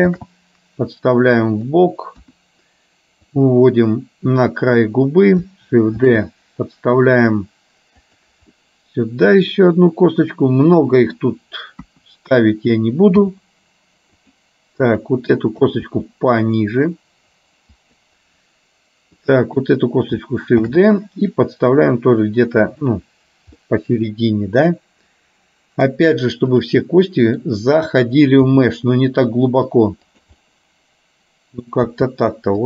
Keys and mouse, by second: 0.3 shift+d, 2.3 KP_1, 3.4-4.9 drag, 6.2 shift+d, 8.7-11.3 middle drag, 11.8 KP_1, 13.3 g, 15.1 click, 15.9 g, 19.3 click, 20.8 shift+d, 23.8-25.9 middle drag, 26.6 click, 27.1 middle click, 30.4-31.7 middle drag, 31.9 g.